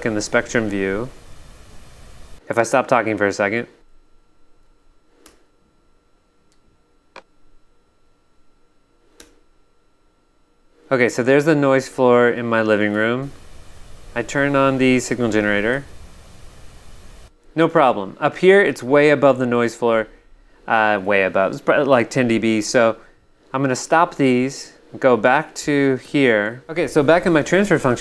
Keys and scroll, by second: 4.6 shift+super+space, 5.2 shift+super+Return, 5.9 shift+Return, 8.1 shift+super+space, 9.2 shift+super+Return, 12.9 g, 15.7 v, 17.2 g, 26.0 6.